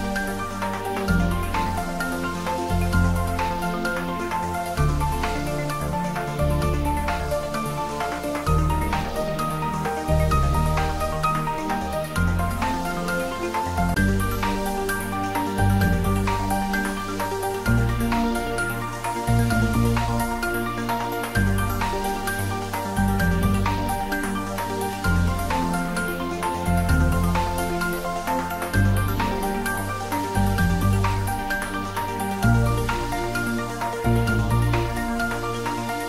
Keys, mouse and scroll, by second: 2.6 shift+z, 5.6 click, 6.8-8.2 drag, 8.2-8.9 drag, 9.6 g, 9.9 z, 13.8 click, 14.1-15.0 middle drag, 15.4 click, 16.6 middle click, 17.9 Tab, 18.4-19.7 middle drag, 20.1 click, 24.6 g, 26.3 click, 27.2 s, 28.9 click, 29.6 g, 31.4 click, 32.1 `, 32.5 3, 33.2 scroll down 1, 34.8 click, 35.2 Tab, 35.5 1.